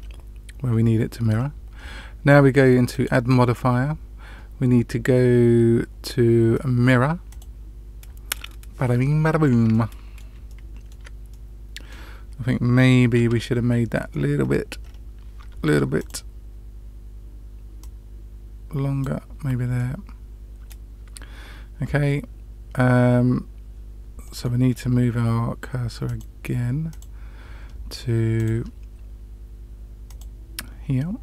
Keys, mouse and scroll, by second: 1.2-1.7 scroll down 2, 2.8-7.4 drag, 9.7 middle click, 10.4-10.8 shift+middle drag, 11.2 middle click, 13.1 ctrl+z, 14.0-14.5 middle drag, 14.7 scroll up 1, 14.8 scroll down 1, 14.9-15.4 scroll up 1, 15.4 Tab, 15.9 click, 17.7-19.0 drag, 19.7-20.6 middle drag, 24.2 middle click, 24.6-26.0 scroll up 2, 26.0 click, 26.8 click, 28.3 click, 30.0 click.